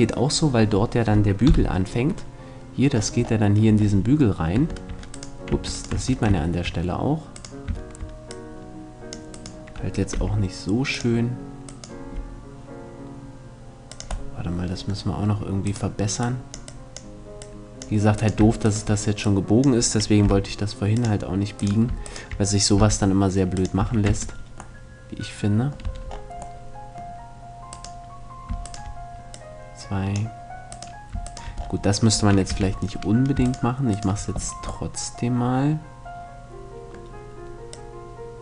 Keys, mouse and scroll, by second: 1.1 KP_7, 4.1 Tab, 5.1 Tab, 5.6 Tab, 7.9 click, 7.9 right click, 8.6 middle click, 8.7 right click, 9.1 click, 9.1-10.6 right drag, 9.8 g, 10.6 middle click, 11.1 click, 11.3 middle click, 11.6 g, 13.9 middle click, 14.4 click, 15.1-17.1 right drag, 15.3 click, 15.8-17.4 drag, 19.9 g, 22.4 g, 23.4 a, 23.7 Tab, 25.5 Tab, 27.9-28.9 right drag, 28.9 click, 32.1 shift+z, 33.1-35.1 right drag, 34.5-36.4 middle drag, 37.5-38.4 drag.